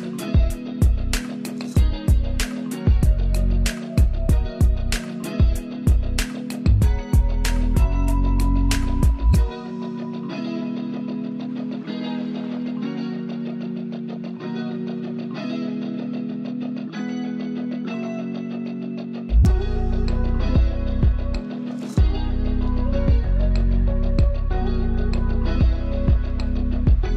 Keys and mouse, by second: 3.9 =, 8.2 =, 8.3 ctrl+z, 9.3 ctrl+d, 10.5 ctrl+space, 10.8 ctrl+alt+click, 15.1 ctrl+space, 15.3 ctrl+click, 15.5 ctrl+space, 17.6 ctrl+alt+click, 21.5 ctrl+space, 21.8 ctrl+alt+click, 22.9 ctrl+space, 23.8 ctrl+alt+z, 24.9 click.